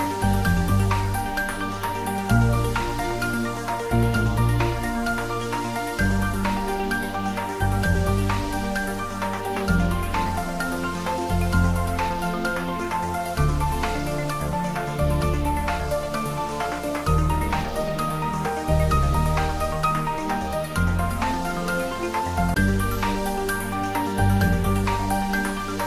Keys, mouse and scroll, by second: 0.7 Return, 4.9 click, 6.3-8.1 scroll up 1, 9.1 Tab, 18.8 Tab, 20.6 click, 21.2 Tab, 23.8 scroll up 1, 24.9-25.8 middle drag.